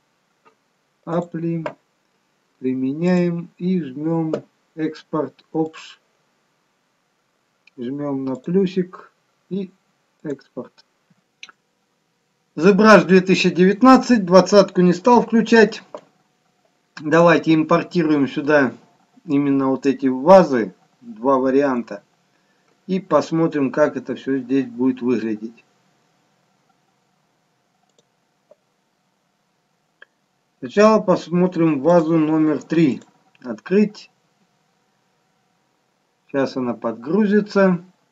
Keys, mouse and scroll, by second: 1.4 click, 3.2 click.